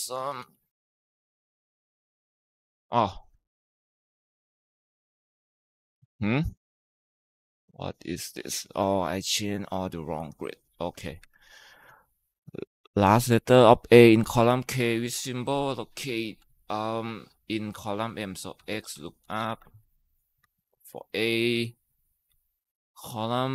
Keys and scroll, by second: 0.0-0.8 typing, 1.0 Tab, 1.9 Left, 2.1 Left, 3.8-4.6 typing, 5.7 Escape, 10.0 Tab, 11.0 Right, 16.1 =, 18.4-20.3 typing, 20.7 Down, 21.3 Down, 21.8-22.6 typing.